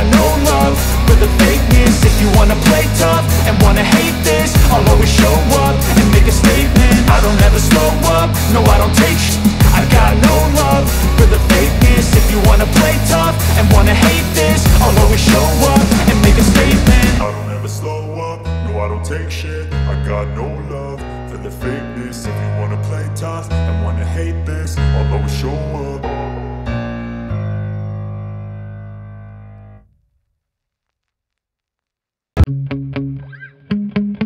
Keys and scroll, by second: 5.2 z, 7.7 space, 8.9 b, 10.1 [, 13.0 space, 16.4 [, 17.0 [, 17.3 ], 19.1 ], 24.6-26.1 typing, 27.3 v.